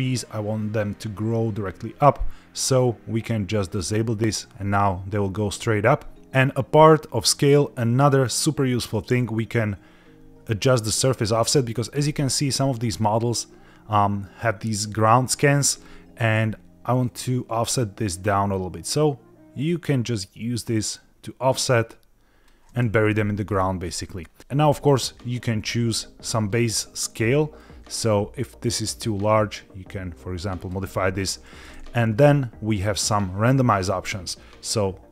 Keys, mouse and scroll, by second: 3.8 click, 11.3-12.0 scroll up 2, 12.0-12.7 middle drag, 17.0-22.4 shift+drag, 23.5 middle click, 24.6 middle click, 25.0-26.1 scroll down 1, 27.5-30.8 drag, 32.1 scroll down 1.